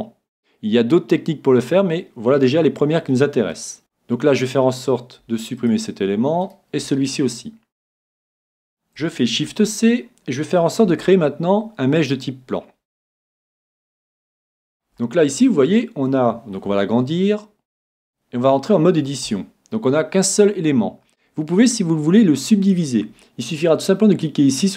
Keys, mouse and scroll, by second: 3.8-5.0 middle drag, 5.0 scroll up 1, 5.2 x, 5.3 middle click, 6.5-8.4 right drag, 6.8 x, 7.7 middle click, 8.4-9.9 middle drag, 9.4 s, 13.3-17.5 middle drag, 16.7 s, 18.1-19.9 drag, 19.3 Tab.